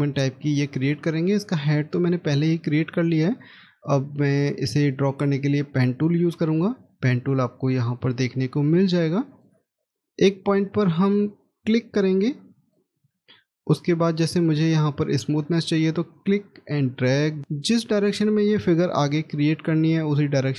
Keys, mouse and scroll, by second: 0.8 middle click, 10.4 scroll up 1, 13.1 middle click.